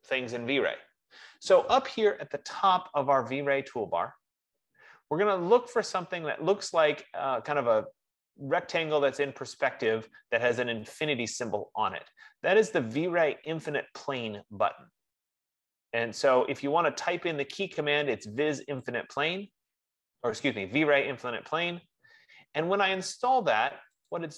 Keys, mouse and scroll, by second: 19.2 click, 19.9 F15.